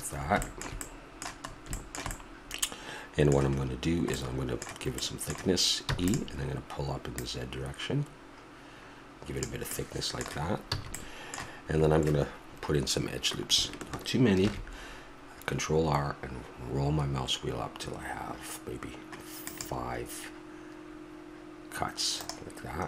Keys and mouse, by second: 4.1 middle click, 5.8 e, 7.1-8.3 drag, 9.7 click, 10.7 a, 14.4 ctrl+r.